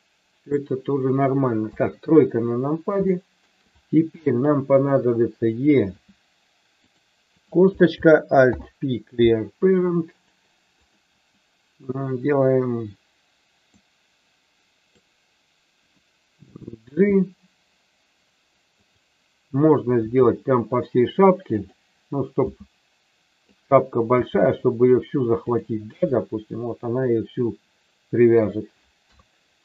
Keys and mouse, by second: 1.5 KP_3, 3.0 middle click, 4.8 click, 5.9 e, 6.8 click, 7.3 click, 8.4 alt+p, 13.8-14.8 drag, 16.4 g, 18.8 click, 20.0 r, 21.4 click, 22.4 s, 23.4 click, 24.2 g, 25.4 click, 26.2-28.4 middle drag, 29.0 KP_3.